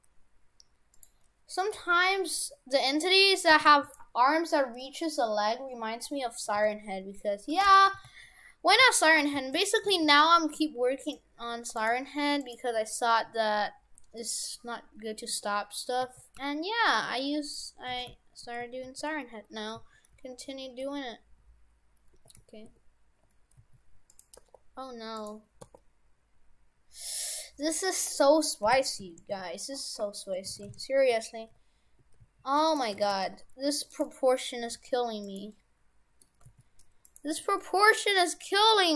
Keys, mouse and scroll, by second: 1.7 g, 3.5 shift+f, 6.5 s, 7.7 shift+f, 10.1 s, 11.8 right click, 11.9 Tab, 12.5 right click, 14.2 middle click, 16.1 a, 16.4 g, 17.9 shift+f, 24.4 r, 25.7 r, 30.6 shift+f, 33.0 shift+f, 34.7 g, 35.5 middle click, 36.4 g, 37.4 middle click, 38.0 scroll down 4, 38.8 middle click.